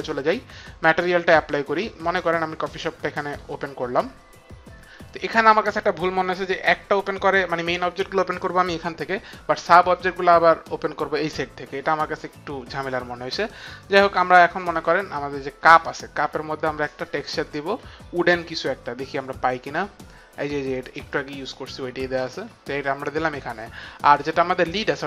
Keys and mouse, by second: 0.0 click, 3.3 click, 15.7 click, 21.1 click.